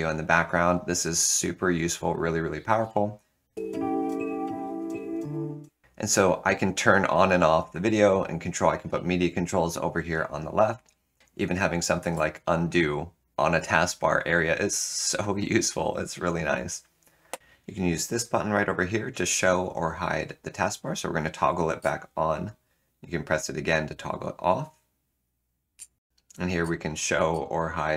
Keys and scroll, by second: 12.0 ctrl+z, 26.0 alt+Return, 26.6 super+d, 27.3 super+d.